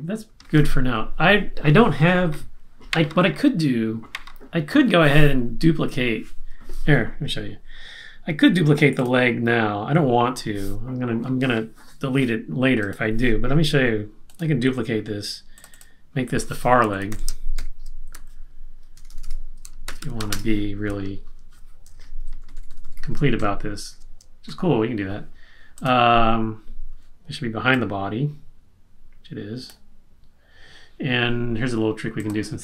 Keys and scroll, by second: 16.6-20.6 typing, 22.4 shift+Right, 22.5 shift+Right, 22.6 shift+Right, 22.7 shift+Right, 22.9 shift+Right, 24.6 Left.